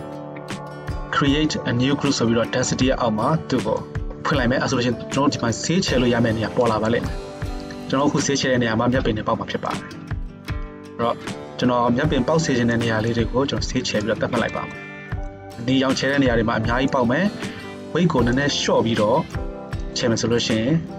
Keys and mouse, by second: 3.8-20.9 drag.